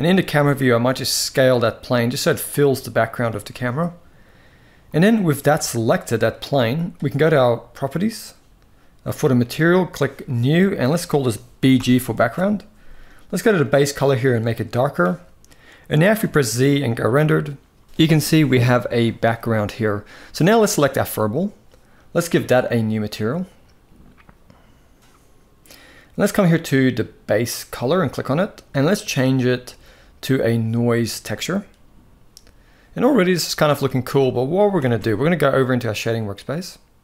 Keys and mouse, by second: 0.8 s, 5.2 click, 7.7 click, 9.9 click, 10.5-11.9 drag, 15.9 z, 20.3 click, 22.3 click, 27.7-30.9 drag, 33.3 z, 34.3 ctrl+s, 34.5 ctrl+s.